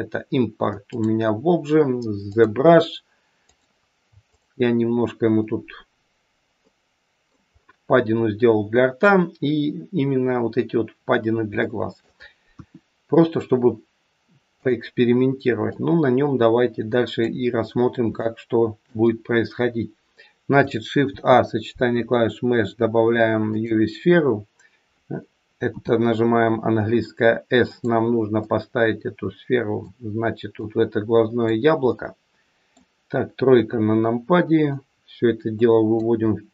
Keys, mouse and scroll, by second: 6.5 middle click, 7.5-9.5 scroll up 4, 11.5 shift+middle click, 12.5 KP_1, 13.1-14.5 scroll down 3, 14.5 click, 15.6 click, 17.6-18.1 scroll up 3, 18.2 shift+middle click, 21.0 shift+a, 24.9-25.6 scroll down 2, 25.6 s, 28.4 click, 30.6 click, 31.8 middle click, 33.5 KP_3, 34.8 click, 36.1-36.5 scroll up 5.